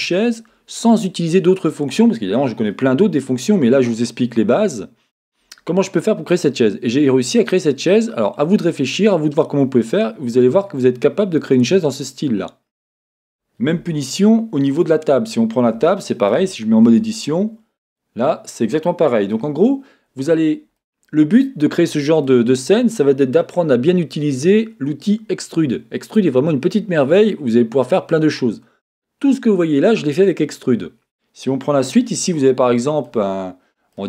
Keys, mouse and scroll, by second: 13.8 Tab, 14.7-15.8 drag, 15.9-34.0 shift+middle drag, 16.3-16.9 scroll up 2, 16.9 Tab, 20.3-20.8 scroll down 2, 33.3-33.9 scroll up 2.